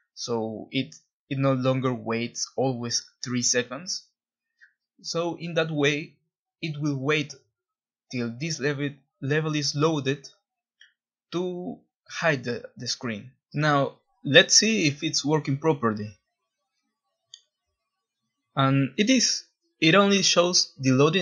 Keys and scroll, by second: 7.4 w, 7.8 Escape, 8.3 ctrl+b, 8.8 typing, 14.6 w, 15.1 w, 15.2 w, 16.8-19.1 typing, 20.4-21.2 typing.